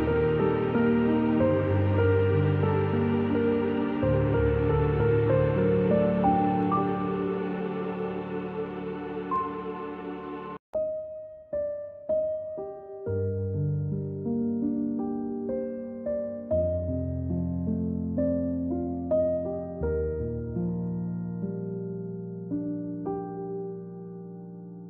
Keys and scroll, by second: 3.0 z, 3.7 a, 11.8-13.0 typing, 15.6-16.5 space, 17.5 a, 21.1 v, 22.3 v, 23.9 a.